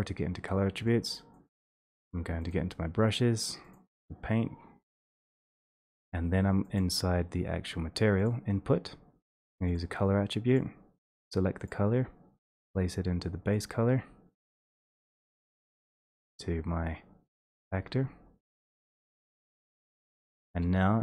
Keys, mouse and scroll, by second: 1.2 click, 1.9 click, 2.5 click, 3.8 click, 5.2 click, 5.7 click, 5.8 1, 6.5 middle click, 6.8 click, 8.2 click, 10.6 click, 11.1 click, 11.9 click, 13.6 click.